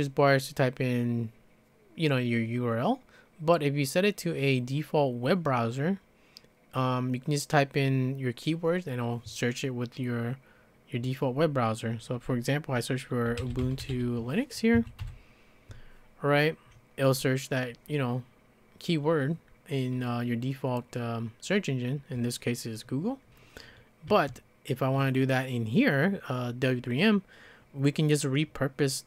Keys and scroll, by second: 13.0-14.4 typing, 14.7 Right, 15.0 Return, 24.1 `.